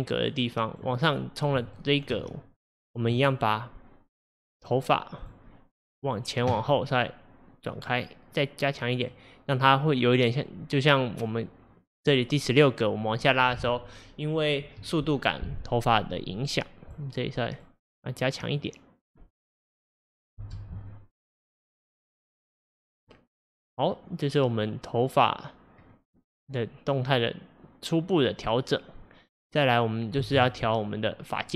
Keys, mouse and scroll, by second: 1.8-2.3 shift+middle drag, 2.3-3.0 scroll up 7, 4.7-6.2 drag, 7.1 click, 10.0 click, 16.4 click, 17.6 click, 18.6 click, 20.1 scroll down 1, 20.4 space, 25.8-26.6 scroll down 2, 30.3 space.